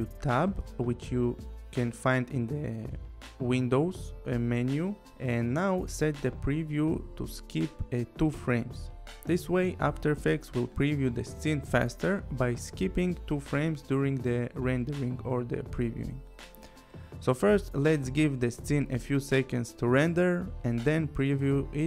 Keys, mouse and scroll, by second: 1.9 click, 5.4 click, 6.6 click, 10.2 click, 11.5 space.